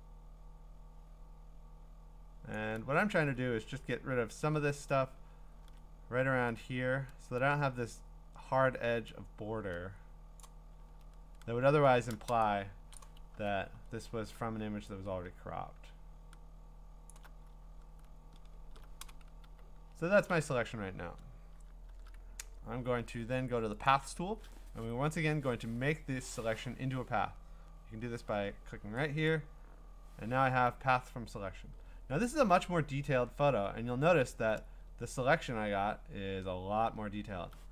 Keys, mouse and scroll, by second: 2.5 alt+click, 3.0 scroll up 3, 3.7-4.1 scroll up 3, 4.1 scroll down 4, 4.9-6.1 alt+scroll up 6, 6.1-8.0 scroll up 1, 8.0 scroll, 10.4 alt+click, 11.1-11.5 scroll up 5, 11.5 scroll down 4, 11.5-12.3 scroll down 7, 12.5-13.0 scroll, 13.0 click, 13.6-14.3 scroll, 17.1 alt+click, 17.6-18.5 scroll, 19.4 q, 20.3 q, 24.3-27.0 drag, 29.3 click, 32.0-32.6 scroll, 33.0-34.5 scroll, 35.0-35.9 scroll.